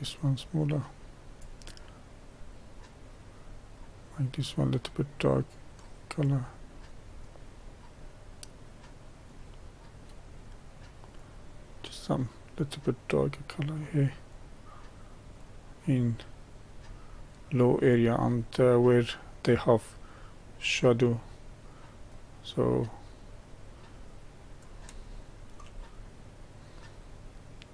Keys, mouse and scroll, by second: 18.2-19.4 middle drag, 19.4-25.0 drag, 25.0 shift+middle click, 26.0-27.7 drag.